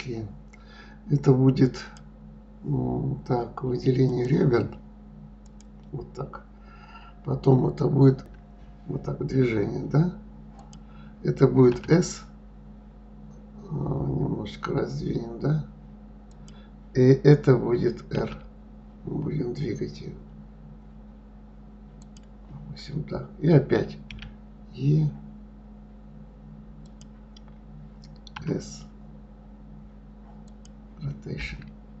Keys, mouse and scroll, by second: 1.8 click, 4.1 click, 5.4 click, 8.2 e, 24.1 e.